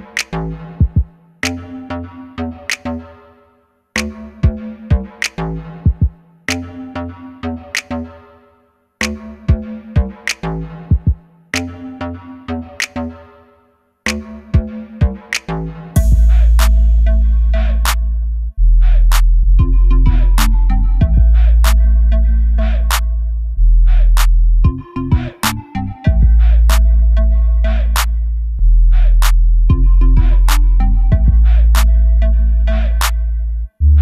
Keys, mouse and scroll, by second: 0.1 scroll down 1, 0.2 scroll up 1, 0.5 KP_3, 0.8-1.2 scroll up 1, 1.2 g, 3.9 click, 4.0-4.4 scroll up 1, 4.4-4.8 scroll down 1, 4.8-5.6 scroll up 1, 5.6 Tab, 6.0 ctrl+r, 7.0 click, 7.4 1, 7.9 shift+z, 8.2 click, 9.3-10.5 middle drag, 10.2 shift+z, 10.5 click, 10.8 Tab, 11.0 click, 11.3-13.2 middle drag, 12.0 scroll up 1, 12.6-13.2 scroll up 1, 13.2 click, 13.6 Tab, 14.0 click, 14.5 3, 14.6 click, 17.4 click, 18.7 s, 19.4 Escape, 19.8 s, 20.5 click, 22.7 i, 23.4 click, 23.8 e, 26.6 click, 27.0-28.1 right drag, 28.0 Tab, 28.1 click, 28.6 scroll down 1, 29.0-34.0 middle drag, 29.6 scroll down 1, 31.4 scroll down 1, 33.4-34.0 scroll up 1.